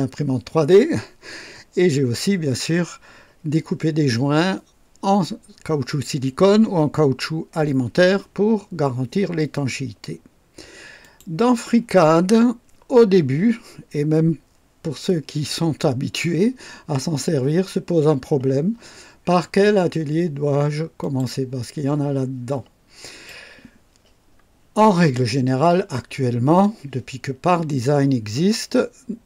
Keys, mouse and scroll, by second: 11.0 click, 21.0 click, 23.1 click.